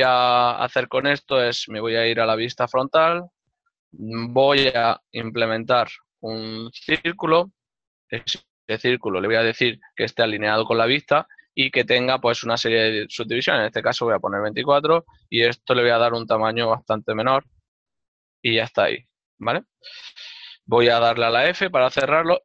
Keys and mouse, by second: 1.5 1, 3.6 5, 4.3 ctrl+middle click, 8.9 shift+a, 9.2 F6, 10.1 click, 11.3 click, 13.3 Escape, 14.7 click, 15.7 KP_0, 15.9 KP_Decimal, 16.6 KP_Enter, 21.1 ctrl+middle click.